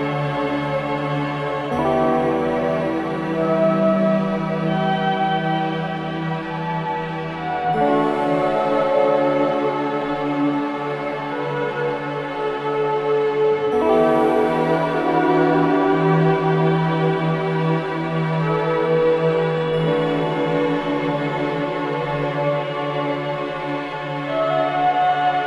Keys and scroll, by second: 2.3-2.9 typing, 3.2 Return, 5.2 ], 6.8 ], 7.8 4, 11.6 3, 23.8 ], 24.2 ].